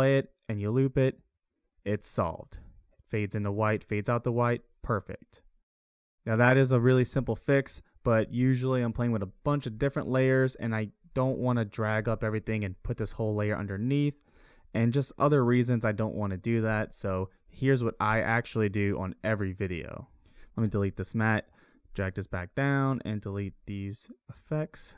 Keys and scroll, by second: 20.8 Delete, 23.4 Delete, 24.7 Delete.